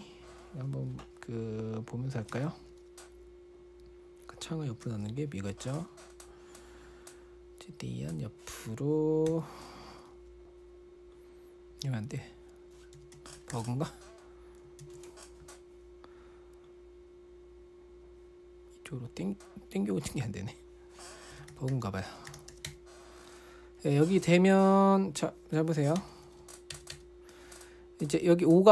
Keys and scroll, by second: 2.7 super+1, 5.2 super+d, 9.7 0, 14.2-15.1 typing, 21.5-23.6 typing, 26.1-27.3 typing.